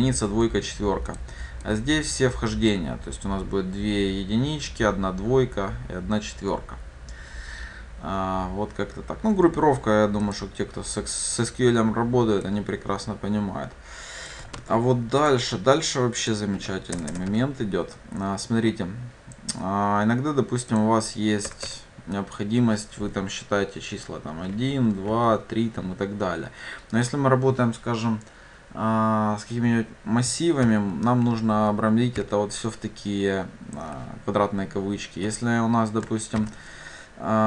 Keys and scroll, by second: 14.6 ctrl+c, 17.4 ctrl+v.